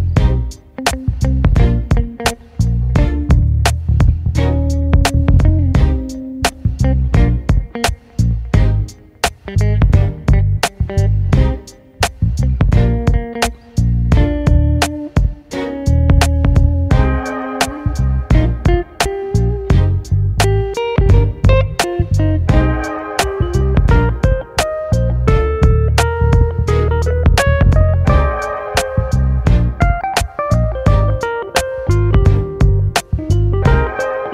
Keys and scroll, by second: 23.0 super+z, 25.6 ], 28.1 [, 28.4 ], 31.2 space.